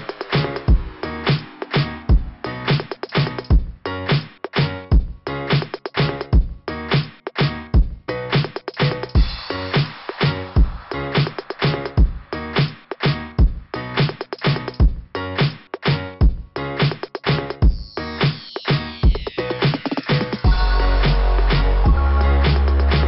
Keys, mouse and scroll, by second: 0.2 click, 2.2 click, 7.3 click, 8.5 click, 8.5 click, 9.5 click, 9.6 click, 10.3 click, 10.4 click, 12.4 click, 12.7 click, 15.0 click, 16.3 click, 17.3 click, 17.4 click, 18.8 click, 18.9 click, 19.6 click, 19.6 click, 22.8 click.